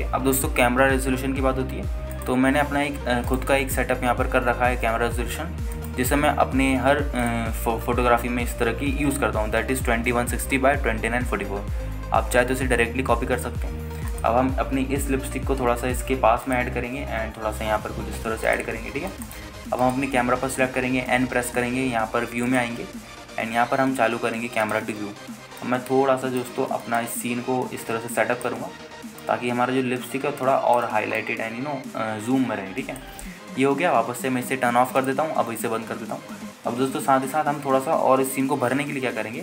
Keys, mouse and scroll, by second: 0.0 n, 0.2 click, 3.3 click, 4.5-8.9 drag, 14.6-15.2 scroll up 1, 15.3 click, 16.2 g, 16.6 x, 18.2 click, 18.2 g, 18.4 y, 19.7 drag, 19.9 scroll down 1, 20.3 shift+middle drag, 21.0 click, 22.3 n, 23.6 click, 25.8 click, 26.8 middle click, 28.2 shift+middle click, 30.4 click, 32.4 shift+middle click, 36.2 click, 36.7 n, 37.8-39.2 scroll up 1.